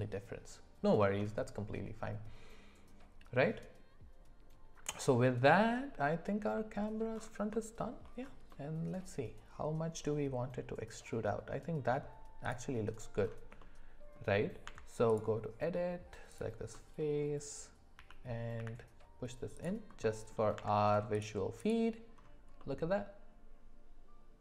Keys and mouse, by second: 6.6 middle drag, 7.5-7.9 middle drag, 8.5-11.6 middle drag, 13.6 middle click, 14.7 Tab, 16.7 middle click, 18.0 g, 20.0 middle click, 20.6 Tab, 22.6-24.4 middle drag.